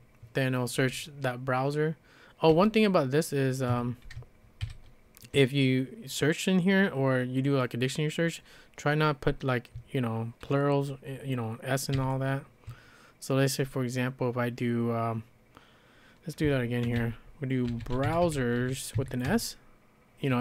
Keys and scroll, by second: 2.5 d, 3.7 Escape, 4.6 shift+b, 11.9 shift+h, 16.6-19.4 typing.